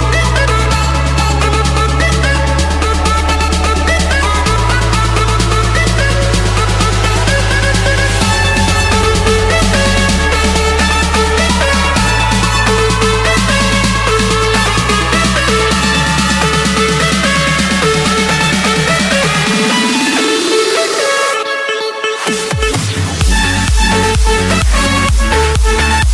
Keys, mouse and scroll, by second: 1.1 j, 1.8 Return, 7.9 c, 8.5 Return, 10.7 click, 13.5 F8, 14.7-16.7 typing, 16.9 Return, 17.7 Return, 19.3-20.3 drag, 21.3-22.8 typing, 23.3 Return.